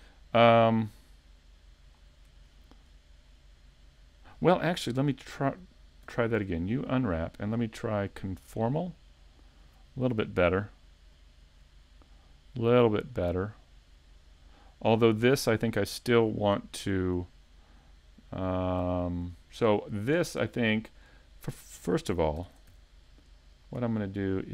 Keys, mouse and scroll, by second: 3.6 shift+middle click, 3.6 scroll down 2, 6.1 u, 18.0 middle click, 19.4-19.8 scroll up 3, 19.7 shift+middle click, 20.4 middle click, 22.4 ctrl+Tab, 23.6 right click.